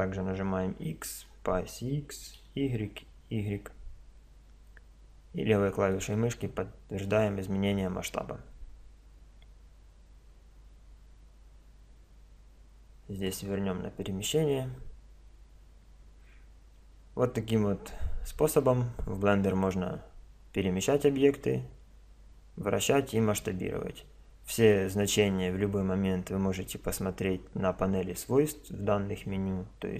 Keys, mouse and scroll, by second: 13.3-15.1 drag.